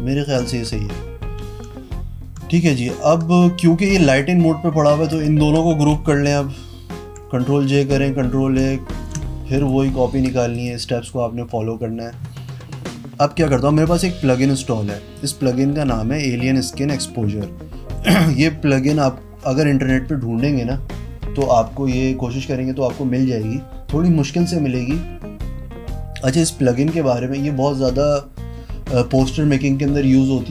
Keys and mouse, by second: 0.4 click, 4.1 click, 4.3 click, 5.3 shift+click, 6.1 ctrl+g, 7.1 ctrl+j, 7.9 ctrl+e, 8.6 ctrl+a, 9.2 ctrl+j, 9.8 click, 10.4 Pause, 10.7 click, 15.4 click.